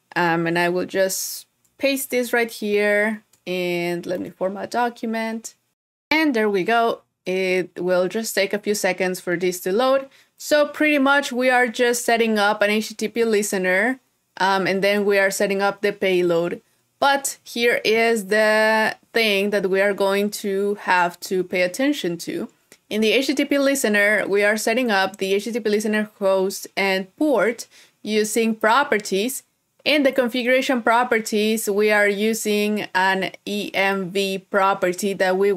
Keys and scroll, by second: 2.1 super+s, 2.9 shift+super+p, 20.7 super++.